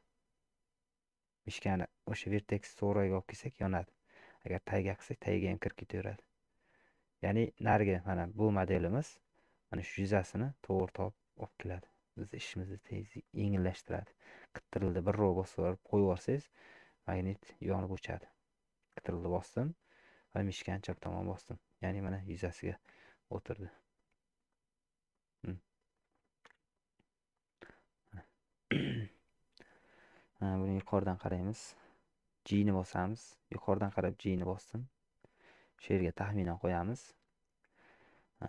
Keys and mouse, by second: 22.1 middle click, 23.0-24.0 middle drag, 25.1 middle click, 26.5 KP_1, 27.6 middle click, 28.8 middle click, 30.8 KP_7, 32.6 g, 36.1 middle click, 37.0 shift+middle click, 37.8 shift+middle click.